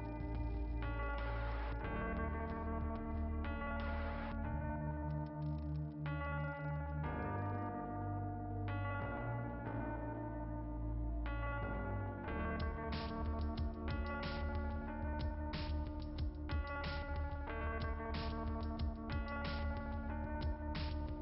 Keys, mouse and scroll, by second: 2.2 scroll down 1, 4.3-4.6 scroll down 2, 5.0-5.5 scroll down 2, 6.2-7.4 scroll up 1, 14.5 click, 18.5-19.0 scroll down 3, 19.0 scroll up 2.